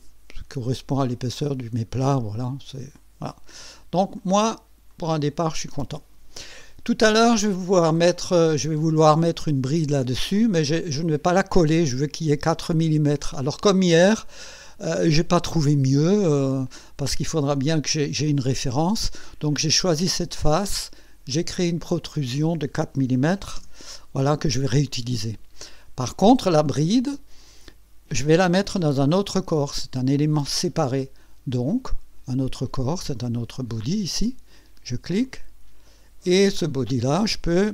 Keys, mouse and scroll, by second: 1.3 click, 2.4-2.7 scroll down 2, 2.9 click, 4.2 click, 4.9 click, 7.2 click, 7.8 click, 10.6 click, 15.5 click, 19.9 click, 21.7 click, 23.2 KP_4, 23.6 KP_Enter, 35.2 click, 37.2 click.